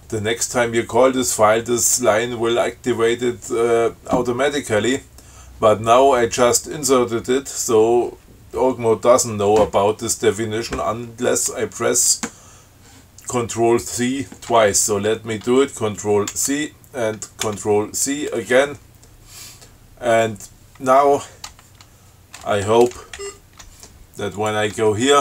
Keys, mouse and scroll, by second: 16.5 ctrl+c, 17.7 ctrl+c, 23.4 shift+Right, 24.6 click.